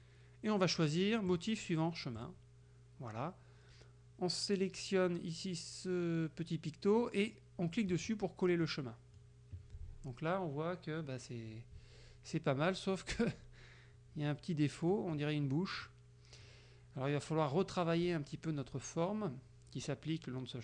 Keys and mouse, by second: 1.4 click, 2.2 click, 8.0 click, 8.7 middle click, 15.0 middle click, 15.9 middle click.